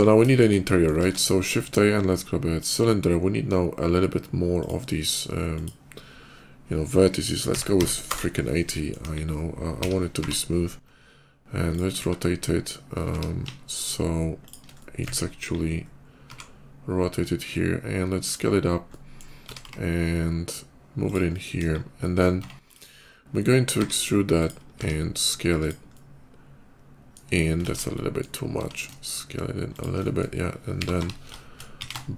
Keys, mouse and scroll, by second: 0.1 middle click, 0.5 middle click, 0.8 shift+a, 2.3 click, 4.4 click, 5.3 click, 7.4 8, 7.7 0, 7.9 Return, 8.5 middle click, 8.8 KP_5, 9.6 r, 10.0 y, 10.2 r, 12.9 r, 14.3 click, 14.6 middle click, 15.1 KP_5, 15.8 middle click, 16.1 s, 18.5 middle click, 18.7 middle click, 19.3 s, 19.5 x, 20.9 click, 21.1 middle click, 21.4 KP_5, 21.8 middle click, 22.1 Tab, 22.5 click, 23.5 e, 24.2 click, 24.6 s, 25.2 click, 25.6-26.9 middle drag, 27.5 ctrl+z, 27.7 middle click, 28.4 s, 29.6 click, 29.8 middle click, 30.5 g, 30.7 y, 30.8 g, 31.6 x.